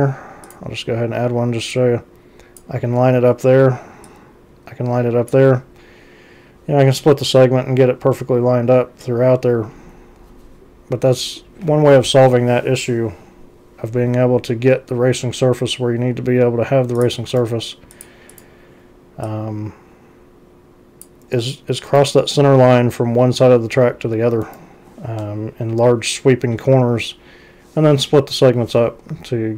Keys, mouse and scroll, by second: 0.5 click, 1.8 click, 4.1-5.3 drag, 17.0 click, 17.3 ctrl+c, 18.0 click, 18.3 click, 19.3-21.1 drag, 21.9 ctrl+c, 24.4 ctrl+c, 25.7 x.